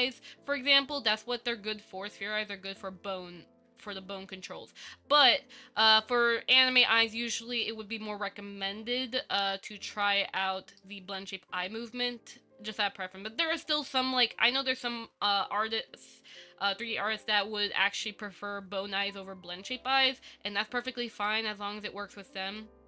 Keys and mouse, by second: 0.5 shift+middle click, 6.9-11.0 middle drag, 16.5-18.2 middle drag, 21.5-22.8 middle drag.